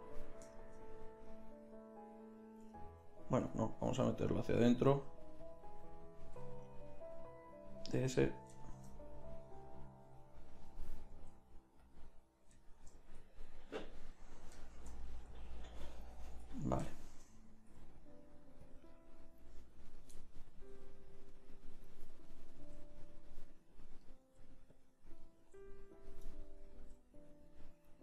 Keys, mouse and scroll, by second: 0.0-1.8 middle drag, 3.4 g, 4.7 g, 6.4 g, 10.2-12.0 drag, 11.2 g, 17.8 g, 20.7 g, 22.6 g, 23.2 click, 24.2 g, 25.4-28.0 right drag, 25.4 g, 26.8 g.